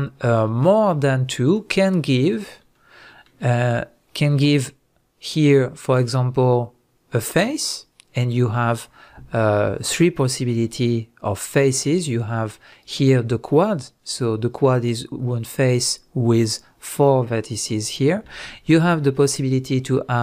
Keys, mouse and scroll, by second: 1.4 shift+drag, 2.3 shift+click, 2.7-19.6 middle drag, 19.6-20.2 scroll up 2.